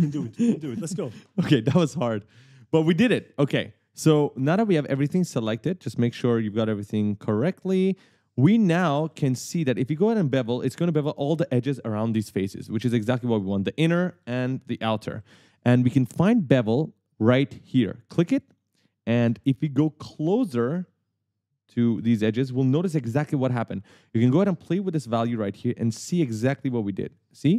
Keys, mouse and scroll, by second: 2.6 right click, 8.8 w, 9.2 d, 13.2 a, 14.4-16.5 typing, 18.5 click, 20.0 right click, 20.0-22.8 typing, 20.7 scroll down 1, 24.6 click.